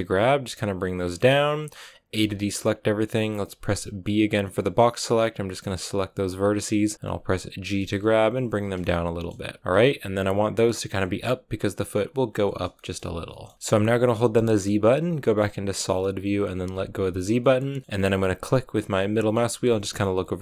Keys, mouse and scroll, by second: 1.2 g, 2.0 a, 5.3 b, 7.4 g, 8.7 shift+middle click, 9.4 scroll down 1, 9.6 a, 12.6 shift+middle click, 13.5-16.6 scroll down 3, 16.6 z, 17.3-19.2 middle drag, 19.2 scroll up 1, 19.4-20.1 scroll down 8, 19.8 shift+middle click, 20.1 middle click.